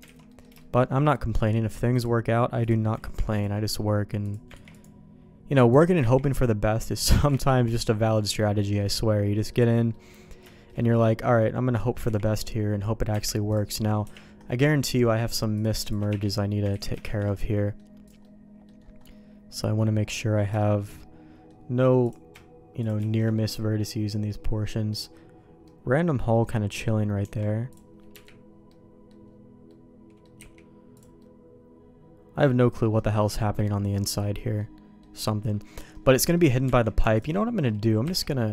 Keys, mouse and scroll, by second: 0.0 alt+a, 0.3 middle click, 0.6 shift+middle click, 0.9 middle click, 2.0 click, 2.6 click, 3.0 ctrl+e, 4.2 click, 4.5 ctrl+e, 6.1 ctrl+e, 7.6 ctrl+z, 8.2 middle click, 8.8 middle click, 9.3 middle click, 9.9 middle click, 10.5 shift+middle click, 10.8 middle click, 12.0 ctrl+e, 13.1 Tab, 13.5 click, 14.4 KP_Decimal, 15.5 click, 15.8 shift+click, 16.1 1, 16.7 ctrl+z, 17.0 shift+1, 17.3 middle click, 18.2 middle click, 19.0-20.1 middle drag, 20.6 shift+middle click, 20.9 middle click, 22.0 click, 22.8 shift+click, 23.0 shift+1, 23.5 middle click, 24.7 middle click, 25.6 middle click, 26.7 middle click, 27.2 Tab, 27.7 click, 28.1 KP_Decimal, 28.7 middle click, 29.6 middle click, 30.4 x, 31.2-32.4 middle drag, 32.9 middle click, 34.0 middle click, 34.6 middle click, 35.9 middle click, 36.6 Tab, 37.1 alt+click, 37.6 middle click, 38.0 x.